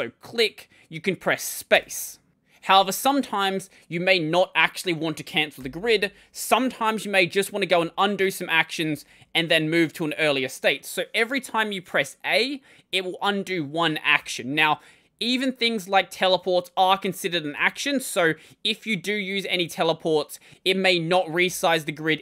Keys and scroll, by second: 1.6 space, 5.4 ctrl+;, 7.6 k, 7.9 l, 9.1-9.6 typing, 14.0 typing, 16.6 typing, 19.2 typing, 21.8-22.2 typing.